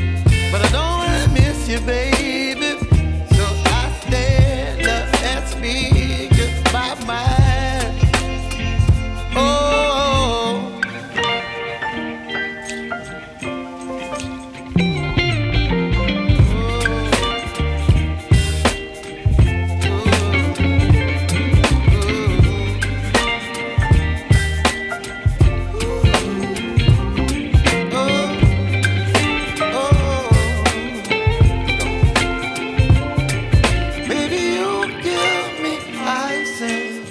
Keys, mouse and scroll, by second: 11.1 ctrl+e, 12.6 z, 14.0 click, 21.7 ctrl+shift+a, 26.1 click, 26.7 space, 26.9 click, 27.5 j, 28.3 click, 35.5 x, 35.7 click.